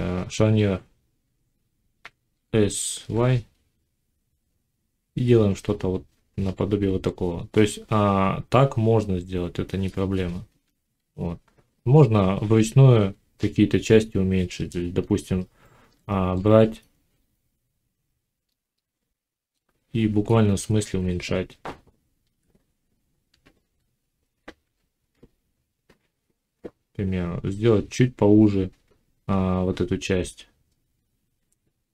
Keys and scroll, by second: 2.2 s, 14.8 Tab, 22.1 g, 23.5 x.